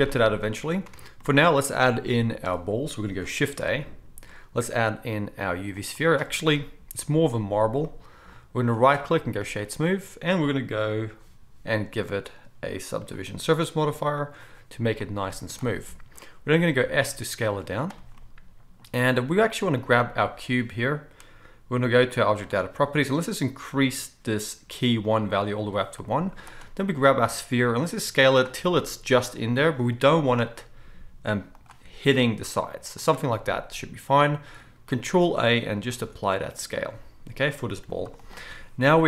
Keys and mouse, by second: 0.9 alt+a, 3.5 shift+a, 12.3-14.3 drag, 14.3-17.5 middle drag, 15.3 z, 16.7 s, 17.5-18.1 drag, 17.6 z, 18.1-29.2 right drag, 18.3 click, 22.3 click, 22.3 middle click, 25.0-26.5 drag, 25.0-26.5 middle drag, 26.9 s, 29.2-34.2 drag, 30.0 g, 32.2 s, 34.2-38.3 right drag, 35.1 ctrl+a, 36.0 ctrl+a, 37.8 g, 38.3-39.0 middle drag.